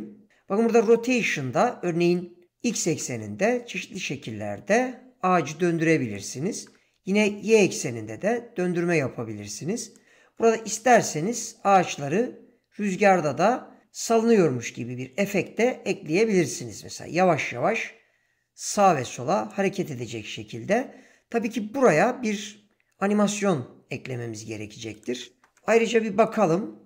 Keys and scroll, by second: 6.5 ctrl+z, 25.4 0.